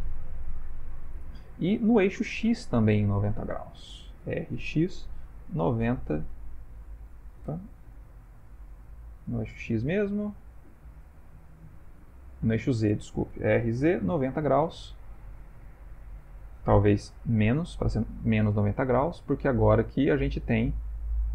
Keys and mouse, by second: 2.5 middle click, 2.9 middle click, 3.2 middle click, 4.2 r, 8.2 middle click, 13.4 r, 19.4 middle click, 20.0 middle click, 20.2 middle click, 20.4 middle click, 21.2 typing.